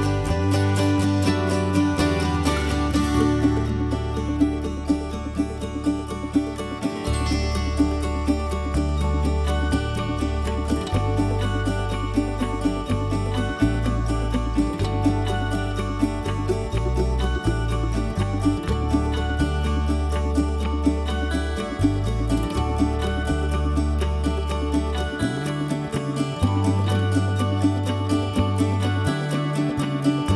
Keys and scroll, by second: 1.0 ctrl+c, 1.2 ctrl+v, 3.4 ctrl+s, 14.1 ctrl+z.